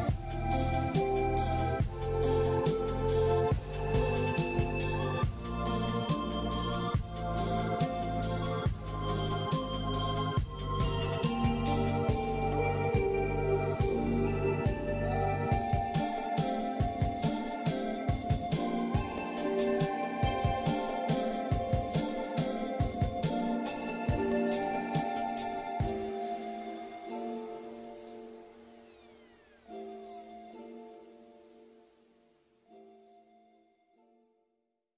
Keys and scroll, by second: 0.3 [, 0.6 ctrl+z, 1.3 ctrl+z, 1.6 ctrl+z, 2.6 scroll down 1, 2.7 scroll up 1, 4.6 ctrl+z, 5.0 ctrl+z, 13.2 ctrl+z, 14.2 ctrl+z.